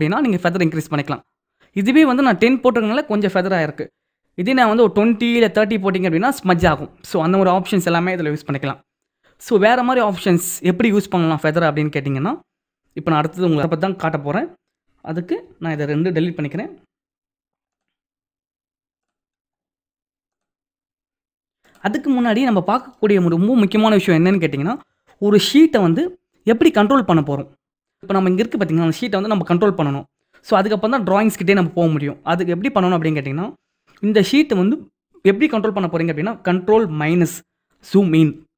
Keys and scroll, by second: 37.4 ctrl+-.